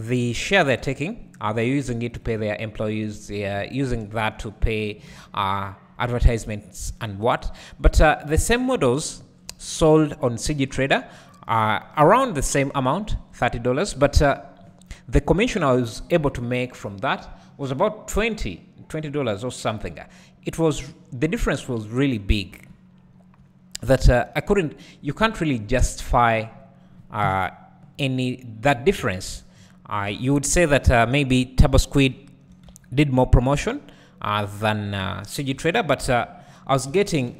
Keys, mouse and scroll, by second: 2.2 click, 2.5 Tab, 2.7-4.0 scroll down 1, 4.0 `, 4.5-5.3 scroll down 1, 5.7 `, 8.5-11.3 drag, 9.1 scroll up 1, 12.0 KP_1, 13.1 Tab, 14.1-14.6 scroll down 1, 14.6-16.1 scroll up 1, 16.1 `, 23.0 scroll up 1, 23.4 `, 25.0 scroll down 1, 26.0 `, 26.1-27.1 scroll up 2, 27.1 scroll up 1, 27.2 KP_1, 27.9-28.9 scroll down 2, 28.9-29.2 scroll down 1, 29.2 Tab, 29.5-30.1 scroll up 2, 30.1 alt+a, 30.3 scroll down 2, 30.6 `, 31.3-32.0 scroll up 2, 32.0 `, 32.7 Tab, 33.7 click, 35.6 ctrl+l, 36.9 shift+d.